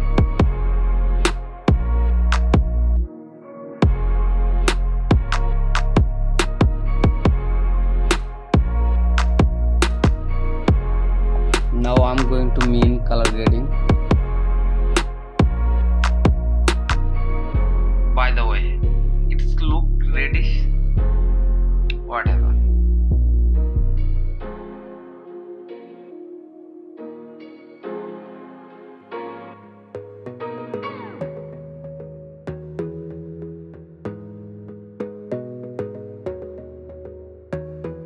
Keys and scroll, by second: 3.4 ctrl+j, 21.3 ctrl+e, 22.0 ctrl+j, 22.2 ctrl+shift+a, 25.5 ctrl+i, 26.1 [, 26.3 ], 26.9 [, 27.0 ], 29.2 ctrl+e, 30.5 ctrl+i, 30.8 ], 32.2-35.0 typing, 32.9 ctrl+z, 33.4 ctrl+j, 33.5 F9, 33.8 Return, 35.1 ctrl+s, 35.9 ctrl+i, 36.4-38.0 typing, 36.7 ctrl+s.